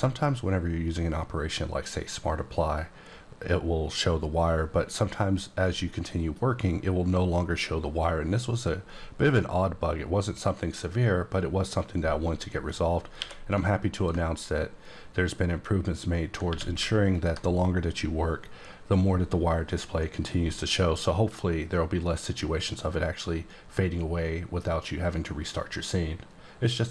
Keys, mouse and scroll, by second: 1.8 click, 13.2 q, 13.9 ctrl+click, 16.5 q, 17.1 ctrl+click.